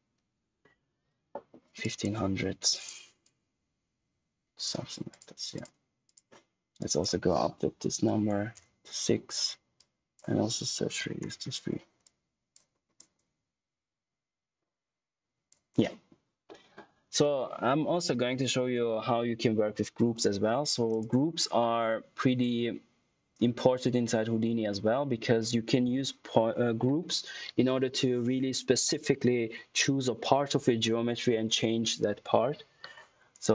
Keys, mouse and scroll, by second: 1.7 click, 9.7 click, 12.6 scroll down 1, 12.9 click, 16.4 middle click, 33.2 right click.